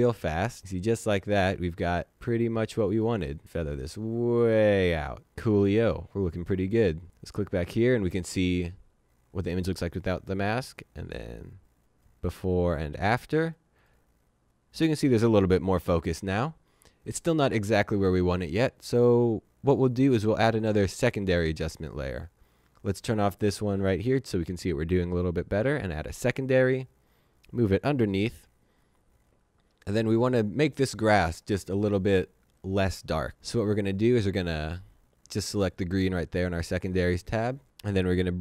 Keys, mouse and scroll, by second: 11.8 click, 20.6 click, 25.7 click, 34.1 click.